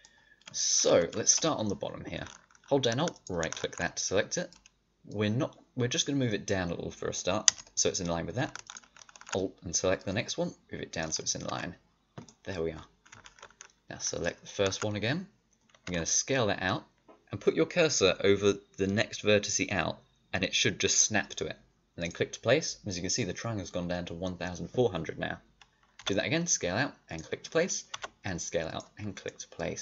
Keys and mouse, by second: 5.0-7.4 drag, 9.9-10.9 middle drag, 11.4 click, 11.4 a, 12.2-14.0 middle drag, 15.8 s, 25.9 s, 27.8 s, 29.0-29.8 drag.